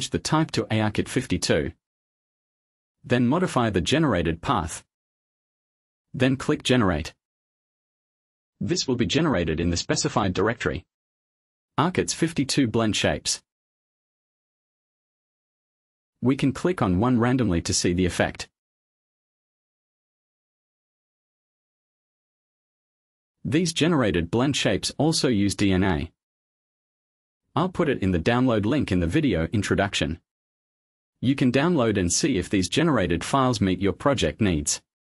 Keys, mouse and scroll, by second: 0.2 click, 2.5 click, 3.7 click, 4.4 click, 5.6 click, 7.4 click, 13.1 click, 15.7 click, 16.1-16.8 scroll down 1, 17.5 click, 20.0 click, 21.4-21.8 scroll up 1, 22.1 click, 29.1 click.